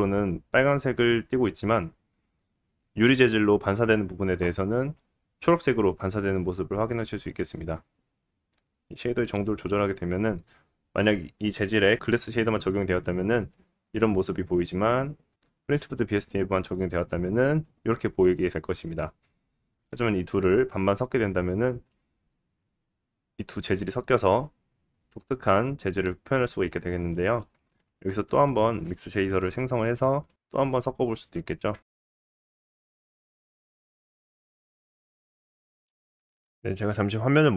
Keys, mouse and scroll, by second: 7.4-27.7 drag, 17.4 scroll down 1, 17.7 middle click, 27.1 middle click, 27.7-33.0 shift+middle drag, 27.9 shift+a, 33.0 click, 33.1-35.9 shift+middle drag, 33.5 shift+a, 35.9-37.5 drag.